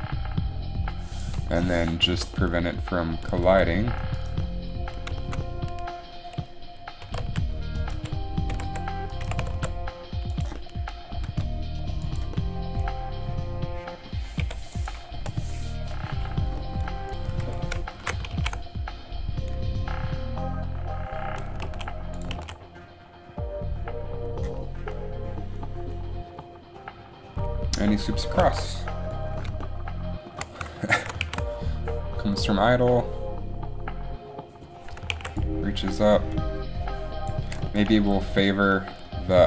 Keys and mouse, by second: 0.0 alt+a, 3.3 alt+a, 3.5 g, 3.6 g, 7.2 r, 8.0 r, 8.1 r, 9.4 r, 11.4 g, 14.1-15.5 typing, 17.5 KP_1, 18.1 shift+Left, 18.4 alt+a, 22.0 alt+a, 22.5 alt+a, 28.6 alt+a, 31.1 shift+Left, 31.3 alt+a, 35.3 alt+a.